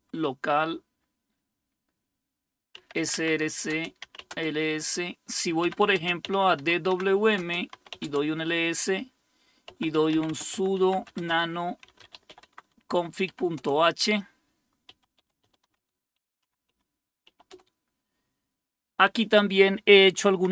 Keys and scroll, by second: 0.0-0.2 typing, 2.5-8.2 typing, 3.7 Return, 7.4 Return, 9.4-17.5 typing, 19.3-20.5 typing.